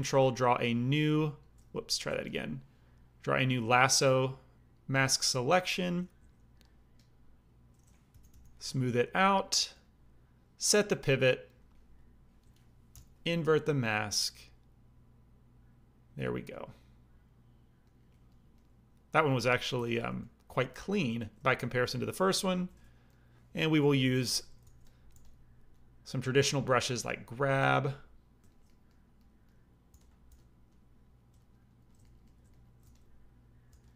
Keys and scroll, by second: 6.1 a, 8.1 shift+r, 8.2 shift+r, 12.9 ctrl+i, 19.7 alt+m, 22.4 alt+m, 24.0 g, 24.1 f, 24.6 f, 25.1 f, 26.3 f, 27.5 f, 29.8 f, 30.2 f, 32.8 f, 33.6 f.